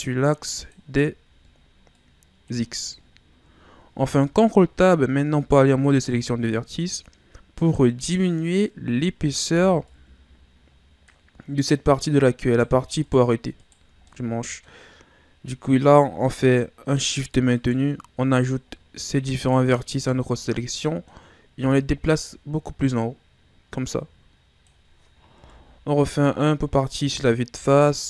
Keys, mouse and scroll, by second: 2.0 click, 2.9-4.1 ctrl+scroll down 2, 4.1 ctrl+Tab, 6.5-6.8 shift+scroll down 2, 6.8-8.4 scroll up 3, 8.4 right click, 9.5 b, 11.4 scroll down 1, 11.5 middle click, 12.4 right click, 13.0 shift+right click, 13.6 shift+right click, 14.1-17.5 middle drag, 17.5 right click, 18.3 right click, 18.7 middle click, 19.4 shift+right click, 19.9 shift+right click, 20.5-21.7 middle drag, 21.7 click, 25.4 KP_1, 27.5 z.